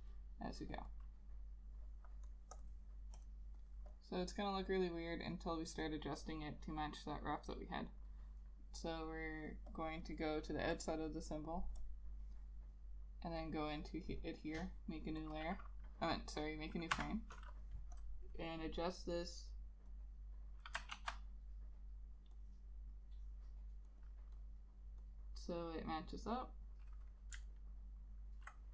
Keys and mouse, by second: 13.6 double click, 17.1 F6, 21.1 ctrl+z, 24.2 double click, 27.4 click, 27.6 alt+click.